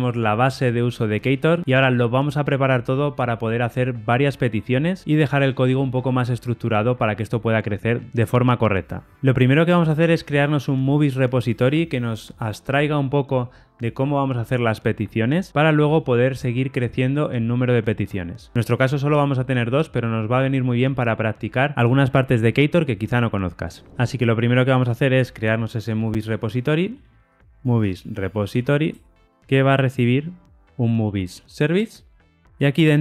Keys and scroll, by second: 25.9 super+n, 31.8 Return.